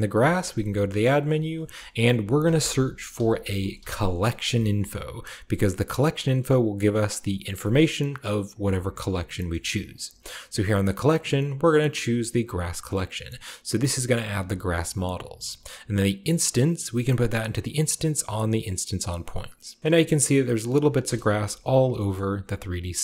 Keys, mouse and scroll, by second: 0.1 typing, 1.0-2.6 middle drag, 1.1-2.8 drag, 2.3-3.8 typing, 5.9-7.7 drag, 7.9-10.0 middle drag, 7.9-9.2 scroll up 1, 9.2-9.8 scroll up 1, 10.5 middle click, 12.6 click, 13.9 click, 14.8 click, 16.1-18.1 drag, 18.5 click, 19.5 middle drag, 19.7 shift+click, 19.9-20.9 shift+middle drag, 20.3-21.1 scroll up 2, 20.9 KP_0, 21.9-23.0 shift+scroll up 1, 22.0-23.0 shift+middle drag.